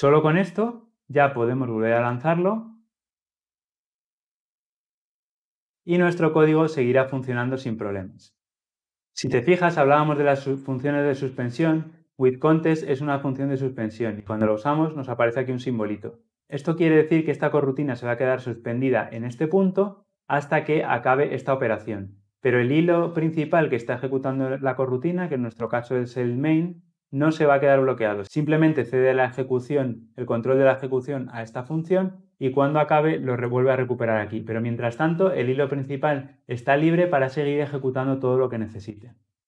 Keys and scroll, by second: 1.9 shift+F10.